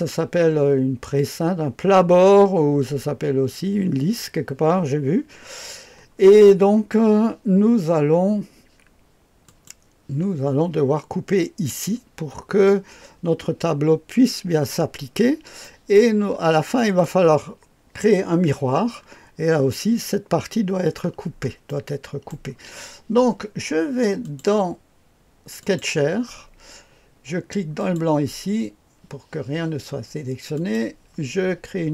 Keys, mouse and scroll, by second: 9.4 click, 14.8-15.9 scroll down 1, 15.6 right click, 16.2-16.7 scroll down 1, 16.7 right click, 18.9-21.1 scroll up 1, 21.1-21.7 scroll down 1, 21.7-22.3 right drag, 24.2 click, 25.6 click, 27.7 click, 30.5 click.